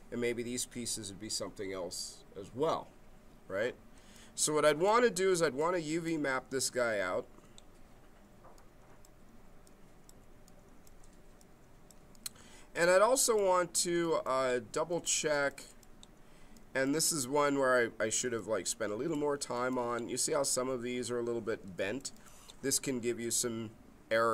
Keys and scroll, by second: 6.5 space.